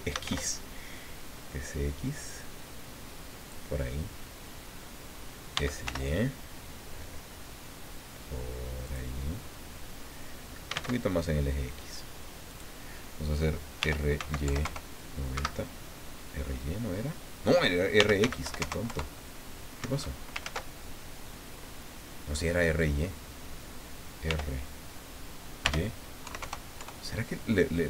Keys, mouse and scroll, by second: 0.0-0.7 typing, 3.4 click, 5.5 s, 5.8 y, 8.8 click, 9.3 scroll up 2, 10.4-11.2 typing, 12.5 click, 13.8 r, 14.2 x, 14.4 KP_9, 14.6 KP_0, 15.3 Escape, 17.7-18.7 typing, 18.9 KP_Enter, 19.8 Escape, 20.4 ctrl+z, 24.3 r, 25.6 y, 26.4 KP_0, 26.8 KP_Enter.